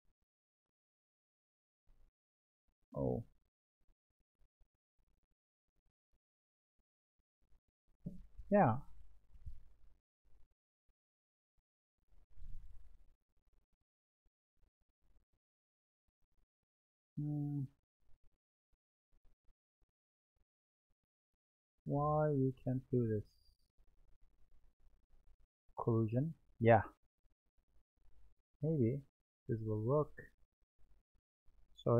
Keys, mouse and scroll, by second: 3.3-4.1 middle drag, 4.1-5.0 scroll up 3, 5.0-6.7 scroll up 1, 6.7-9.7 middle drag, 15.6-17.3 scroll down 2, 17.3-20.3 drag, 22.2 click, 25.8-27.1 drag, 29.1-31.9 drag.